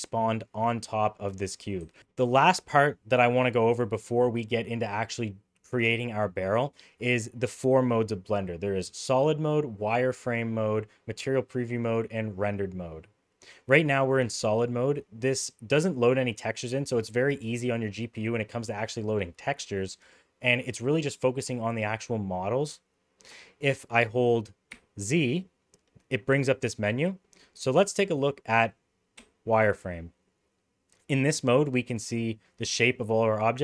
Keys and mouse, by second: 1.8 s, 14.7-15.8 middle drag, 23.4-23.9 shift+middle drag, 24.8 z, 31.4 middle click.